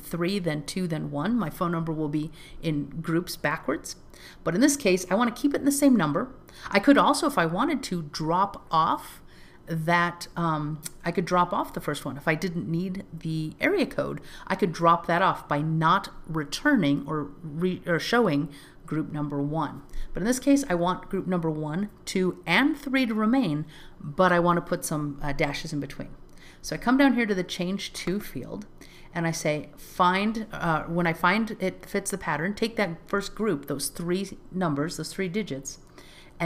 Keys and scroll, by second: 26.7 alt+z.